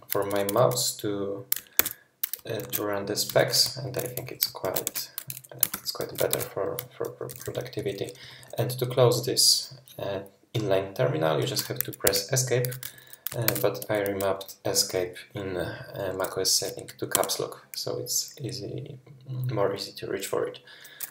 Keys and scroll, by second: 1.8 alt+shift+2, 3.0 ctrl+shift+2, 4.6 shift+super+{, 4.9 super+w, 5.7 shift+super+{, 6.0 shift+super+{, 6.3 super+w, 7.3-8.6 typing, 12.0 Escape, 12.8 k, 13.5 shift+super+e, 17.2 Escape.